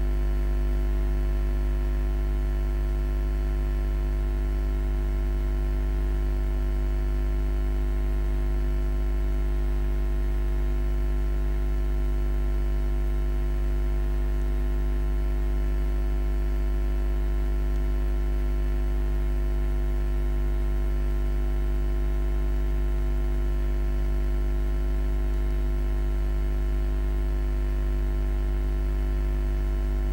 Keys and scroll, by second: 0.2 0, 0.8 Return.